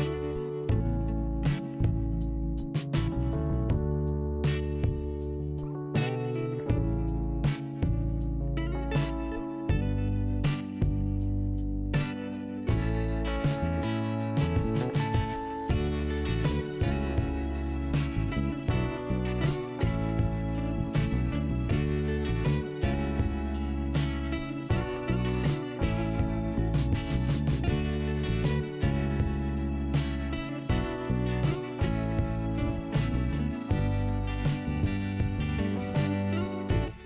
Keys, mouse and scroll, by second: 1.6 click, 1.7 click, 2.9 click, 4.0 click, 4.1 click, 5.5 click, 5.6 click, 6.4 click, 6.5 click, 6.6 click, 9.6 click, 13.7 click, 13.8 click, 14.0 click, 16.1-16.6 scroll up 2, 16.6 click, 16.8 click, 17.5 click, 17.6 click, 19.5 scroll down 1, 21.3 click, 23.0 l, 24.1 click, 24.6 scroll down 1, 25.9 scroll down 1, 27.0 click, 27.0 click, 27.8 click, 27.9 click, 28.8 click, 28.8 click, 30.9 click, 33.6 click, 34.6 click, 36.3 click.